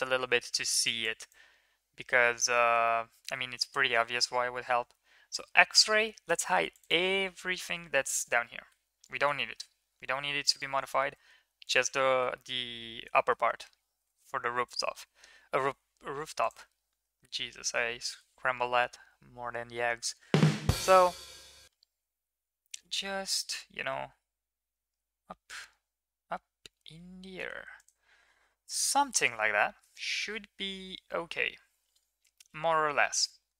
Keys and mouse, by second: 1.0 drag, 2.5 middle drag, 3.7 KP_1, 5.7 click, 7.1 click, 8.7 h, 9.7 KP_3, 10.8 shift+middle click, 11.7 right click, 12.3 middle click, 13.1 shift+middle click, 13.9 g, 16.4 click, 17.1 g, 28.6 click, 29.4-29.8 middle drag, 31.1 KP_1, 32.3 middle click.